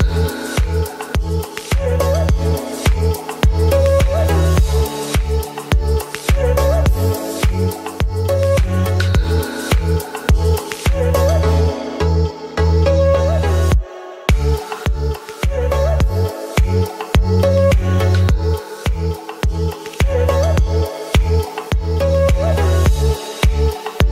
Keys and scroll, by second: 1.6 ], 4.0 ctrl+s, 4.2 ], 5.8 space, 17.4 space, 17.5 [, 19.0 ctrl+z, 21.5 space, 23.9 space.